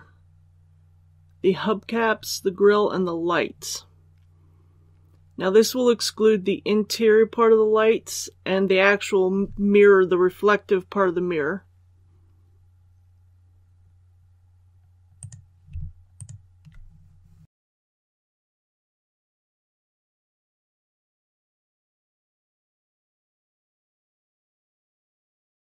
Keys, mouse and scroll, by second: 15.1 right click, 16.0 shift+right click, 17.7 alt+shift+right click, 17.9 ctrl+z, 18.0 scroll up 1, 18.1 shift+middle click, 18.5 alt+shift+right click, 18.7 scroll down 1, 19.3 alt+shift+right click, 19.6 scroll down 1, 19.7 shift+middle click, 20.0 typing, 20.3 middle click, 20.7 middle click, 21.6 shift+right click, 21.8 shift+right click, 22.5 shift+right click, 22.9 middle click, 23.5 shift+right click, 23.9 alt+shift+right click, 25.1 ctrl+z.